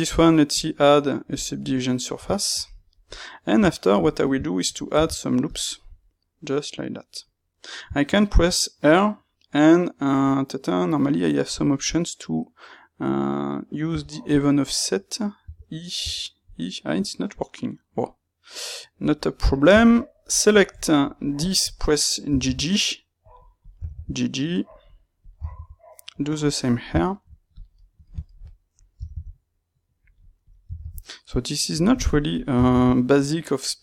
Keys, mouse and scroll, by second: 0.5 space, 3.1 click, 3.6 Tab, 4.9 ctrl+r, 5.7 right click, 5.9-21.3 middle drag, 8.3 ctrl+r, 21.3 click, 22.2 g, 23.5 click, 23.7 g, 25.1 click, 25.3 g, 26.4 click, 26.6 shift+middle click, 27.5 click, 27.7-30.4 ctrl+middle drag, 28.9 g, 30.4 click, 30.6 g, 32.3 click, 32.5 g.